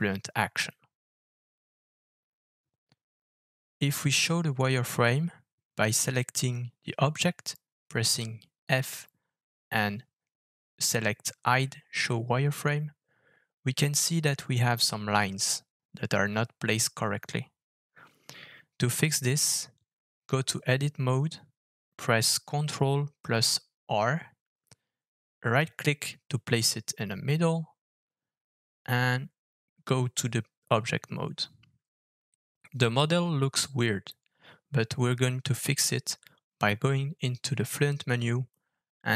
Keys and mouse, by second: 4.7-5.1 shift+middle drag, 6.4 click, 7.2 click, 8.1 click, 8.7 alt+f, 12.5-13.1 middle drag, 20.8 Tab, 24.7 ctrl+r, 29.3 Tab, 33.4 alt+f.